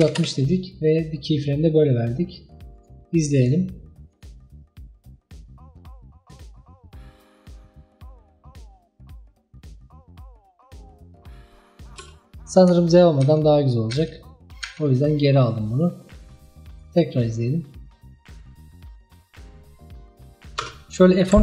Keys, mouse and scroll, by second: 2.8 click, 3.4-7.2 drag, 12.0 space, 13.3 ctrl+z, 14.0 ctrl+z, 14.7 ctrl+z, 16.8 click, 17.3-20.3 drag, 20.7 space.